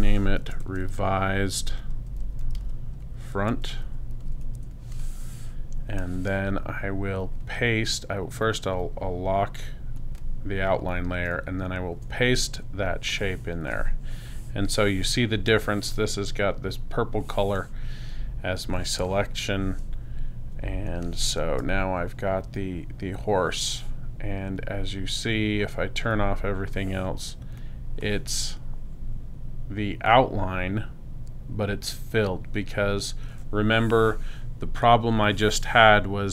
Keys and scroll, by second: 0.4 shift+r, 2.4 d, 2.6 space, 11.9 super+f, 18.1 super+space, 20.5 space.